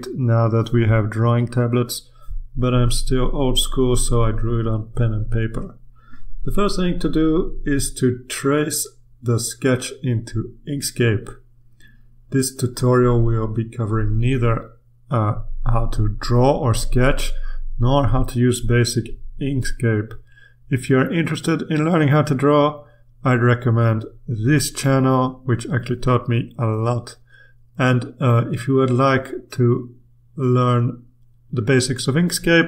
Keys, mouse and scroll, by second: 0.3 ctrl+click, 2.0 click, 4.2 click, 6.4-7.2 ctrl+scroll up 2, 8.0-9.4 drag, 9.7 click, 10.9-13.5 drag, 13.7-15.9 drag, 16.3-17.8 drag, 17.9-19.7 drag, 19.7-20.7 ctrl+scroll up 1, 21.2-22.1 ctrl+scroll up 2, 22.4 ctrl+click, 22.7-23.5 scroll up 1, 23.9 click, 25.4-26.8 scroll up 2, 27.1-28.4 drag, 29.5-31.8 drag, 31.9-32.6 drag.